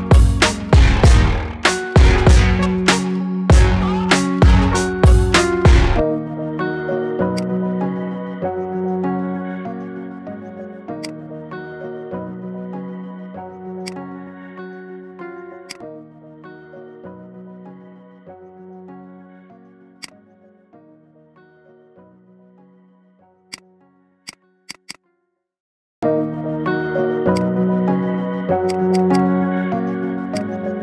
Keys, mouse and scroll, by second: 1.5 KP_1, 2.8 g, 4.9 e, 7.6-9.2 shift+middle drag, 9.2 g, 11.2 middle click, 11.9 e, 14.2 g, 16.2 KP_1, 16.9 shift+middle click, 17.2-17.6 scroll up 3, 17.6 shift+middle click, 18.1 s, 21.0 middle click, 21.4 scroll down 3, 21.7 middle click, 23.4 click, 24.2 click, 24.6 alt+shift+click, 24.8 alt+shift+click, 25.4 ctrl+b, 27.6 middle click, 27.9-28.6 scroll up 3, 28.6 click, 28.8 alt+shift+click, 29.0 alt+shift+click, 29.8 s.